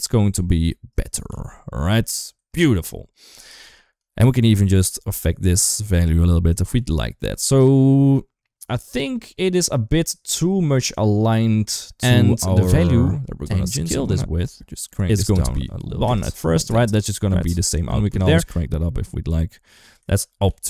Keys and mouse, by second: 1.1 ctrl+z, 2.4 ctrl+s, 3.3 shift+middle click, 4.0-5.9 shift+drag, 6.1 ctrl+z, 6.6 ctrl+s, 7.8 shift+middle click, 8.3 shift+middle click, 11.6 click, 13.0-13.4 drag, 13.9 click, 15.2 click, 16.2 middle click, 17.2 click, 18.1 shift+middle click, 18.5-19.8 drag, 20.0 ctrl+z, 20.3 ctrl+s.